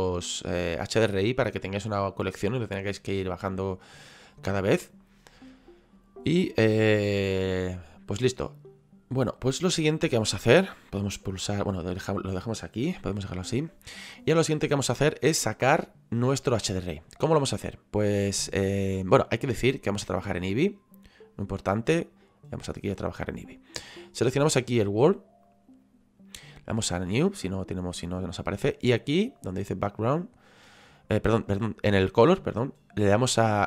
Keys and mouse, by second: 9.5 middle click, 11.7 middle click, 13.2 middle click, 20.0 click, 22.0 click, 25.4 click, 26.9 click, 30.4 click, 32.5 click.